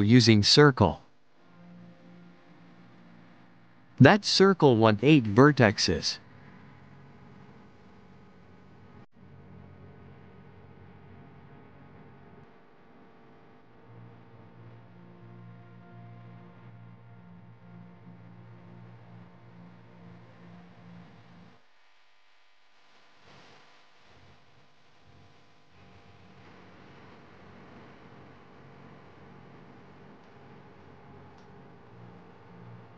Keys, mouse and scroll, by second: 2.0-4.7 drag, 6.5 click, 7.7 click, 8.3 click, 10.2 r, 12.8-13.5 middle drag, 13.5 r, 15.5 KP_3, 16.3 r, 19.0 KP_1, 20.5 click, 23.6 s, 25.5 click, 27.2 s, 29.6 click, 31.7 click.